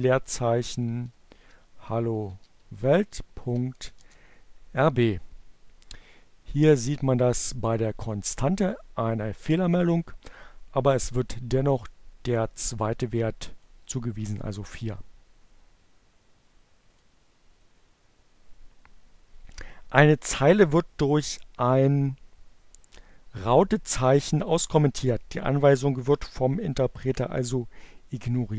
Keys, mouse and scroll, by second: 0.3-3.7 typing, 7.1-9.5 drag, 11.5-13.4 drag, 16.1 click.